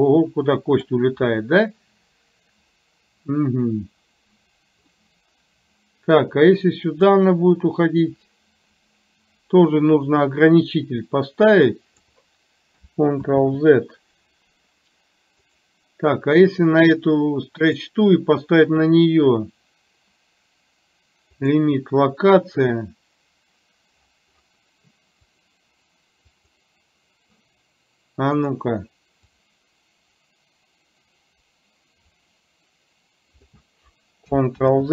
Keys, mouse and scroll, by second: 4.9-6.2 middle drag, 7.3-12.2 drag, 15.5 click, 17.8-21.7 drag, 26.4 click, 29.3-33.7 drag.